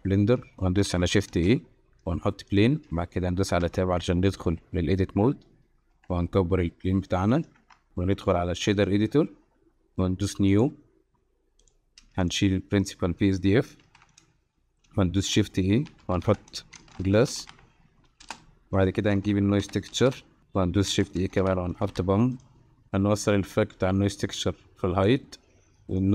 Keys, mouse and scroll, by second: 0.4 click, 1.3 shift+a, 3.6 Tab, 5.9 s, 7.6 Tab, 7.9-8.9 drag, 11.6 click, 12.2 click, 13.9 x, 15.2 shift+a, 18.9 shift+a, 20.9 shift+a, 23.5-25.0 drag, 26.0-26.1 drag.